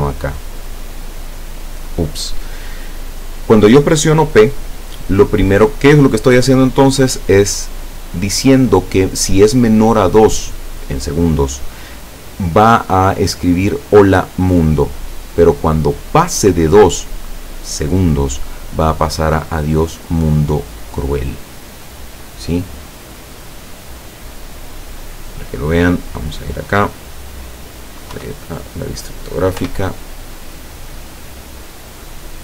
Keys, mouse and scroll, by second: 23.0-24.9 drag, 28.2 KP_5, 29.6 p.